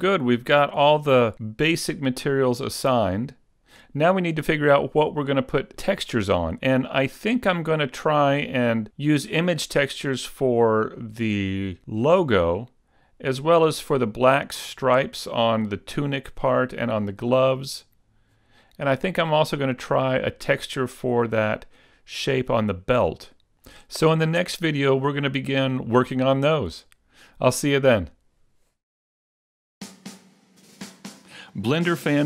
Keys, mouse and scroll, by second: 25.8-28.5 scroll down 1.